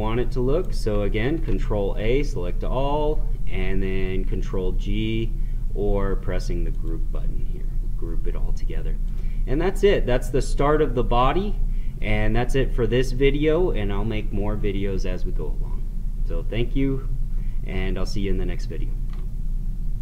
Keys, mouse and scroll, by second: 0.1 right click, 1.3 ctrl+a, 6.8 click, 9.1 click, 9.6-14.3 middle drag.